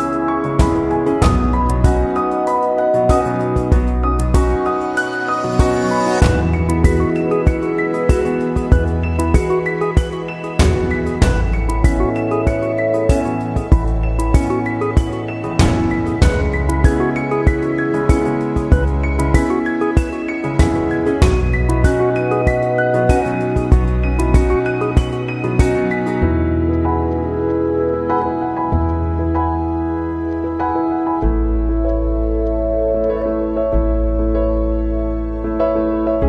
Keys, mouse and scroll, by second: 0.5 click, 0.7 space, 1.2 click, 2.8 ctrl+alt+-, 4.5 right click, 7.0 click, 9.7 ctrl+j, 11.1 click, 14.0 click, 17.1 click, 18.7 space, 18.9-25.5 drag, 28.3-29.7 drag, 29.7 space, 29.8 click, 30.0 space, 30.9 click, 32.1 ctrl+z, 33.5-36.2 drag.